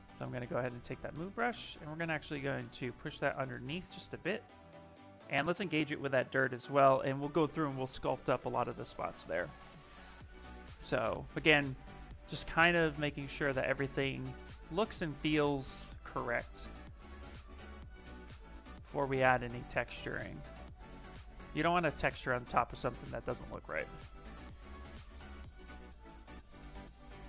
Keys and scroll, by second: 6.3 s, 19.0 ctrl+z, 19.3 s, 22.1 s, 25.9 s.